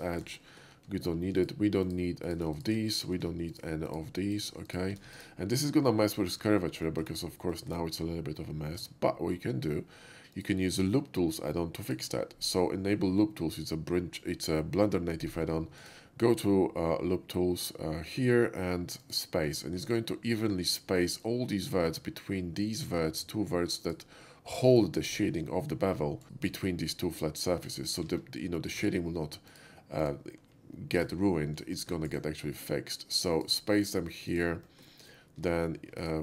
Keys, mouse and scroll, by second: 0.0 click, 0.4 middle click, 1.4 click, 1.9 click, 2.3 alt+shift+click, 2.5 x, 2.6 click, 2.9 middle click, 3.5 click, 3.9 click, 4.4 click, 4.7 alt+shift+click, 5.1 x, 5.2 click, 6.2 shift+middle click, 6.6 shift+middle click, 6.8 shift+middle click, 7.5 shift+middle click, 8.8 Tab, 10.4 click, 11.9 click, 15.8 right click, 19.0 click, 19.6 shift+middle click, 23.9 click, 24.8 shift+click, 26.2 Tab, 26.2 click, 26.4 middle click, 27.1 shift+click, 28.1 ctrl+z, 28.8 Tab, 29.5 click, 30.0 click, 31.0 ctrl+click, 31.3 ctrl+middle click, 31.8 shift+middle click, 32.1 shift+right click, 33.3 shift+click, 34.3 shift+click, 34.7 middle click, 36.1 ctrl+click.